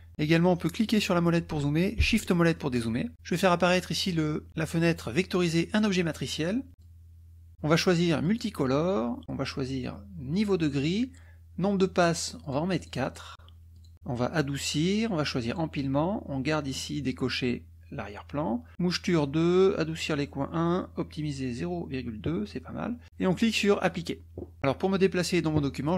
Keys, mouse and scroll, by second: 0.7 click, 2.3 shift+click, 2.7-3.8 shift+middle drag, 3.8 click, 5.8 click, 6.8 click, 8.2 click, 9.2 click, 10.3 click, 12.4 click, 12.8 click, 13.8 click, 14.3 click, 15.4 click, 23.8 click.